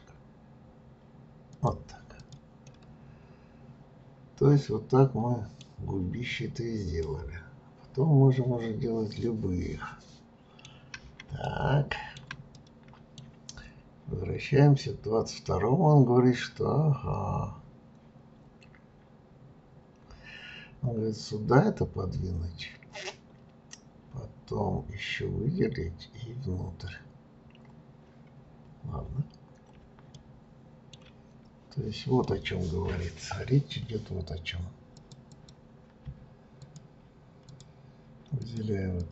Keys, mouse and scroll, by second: 2.2 click, 2.6-5.7 middle drag, 5.8 scroll down 2, 7.0-10.1 middle drag, 10.7-11.4 scroll down 2, 11.4-13.7 shift+middle drag, 13.7-14.3 scroll up 2, 28.7-29.8 scroll down 2, 30.1-31.3 shift+middle drag, 31.3-31.7 scroll up 1, 32.2-34.9 middle drag, 34.9 click, 35.2 click, 36.6 shift+click, 37.5 shift+click, 38.4 shift+click, 38.9 shift+click.